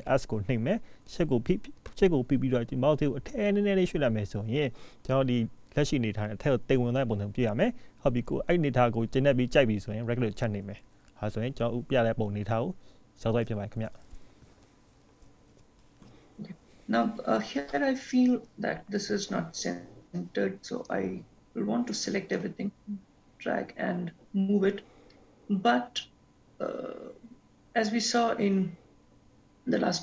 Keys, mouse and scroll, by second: 20.8 click.